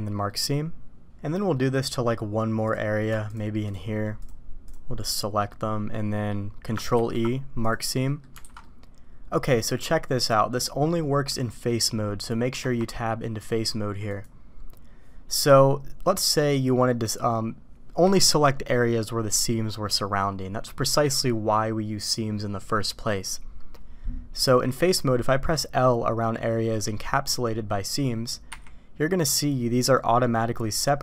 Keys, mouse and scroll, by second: 0.3 middle click, 1.5 middle click, 2.6 click, 3.3 shift+click, 5.5 middle click, 6.9 ctrl+e, 8.0 middle click, 8.4 alt+a, 8.6 click, 9.6-10.3 drag, 12.5 Tab, 15.4-15.9 middle drag, 15.9 click, 24.4 middle click, 28.4 l.